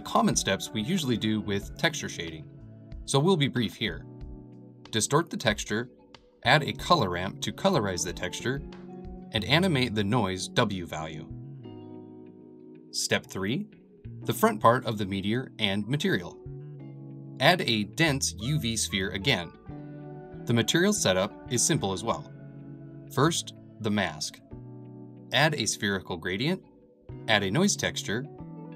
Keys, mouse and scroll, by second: 2.3 space, 6.9 click, 7.5 x, 12.6 click, 12.7-16.4 middle drag, 16.4 click, 16.8 middle click, 17.3 click, 17.7 shift+a, 20.3-23.2 middle drag, 23.2-27.9 drag, 27.9-28.7 middle drag.